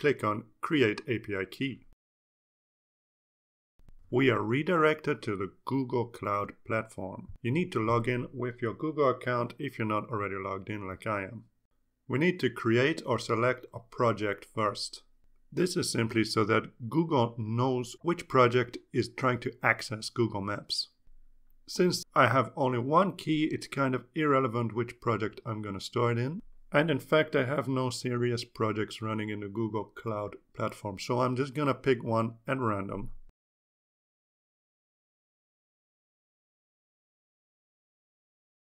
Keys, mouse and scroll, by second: 2.6 click, 5.0 click, 33.6 click, 36.2 click.